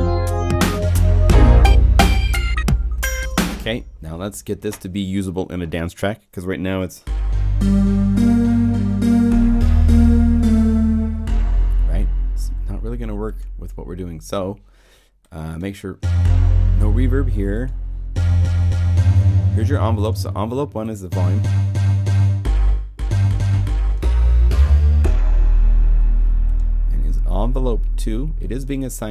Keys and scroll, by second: 3.2 0.